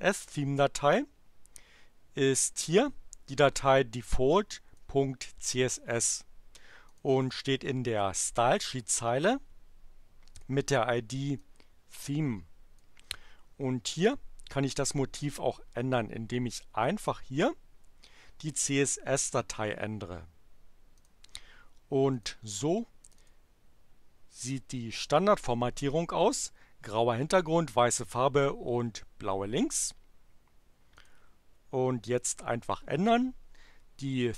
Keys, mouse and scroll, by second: 3.6-4.9 drag, 6.9 click, 10.3 click, 11.4-13.0 drag, 14.0 click, 20.9 click, 22.1 click, 23.0 click, 31.0 click.